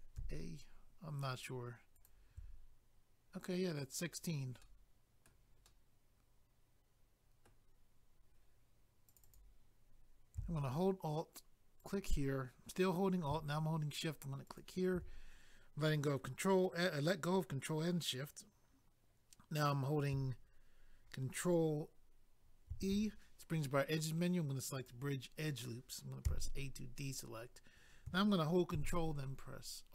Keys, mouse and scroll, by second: 1.9 alt+click, 2.0 alt+click, 4.6 middle click, 5.6 middle click, 8.2 click, 9.0 click, 9.1 click, 9.2 click, 11.8 alt+click, 22.7 ctrl+e, 24.8 click, 24.9 click, 26.2 a, 28.7 ctrl+r.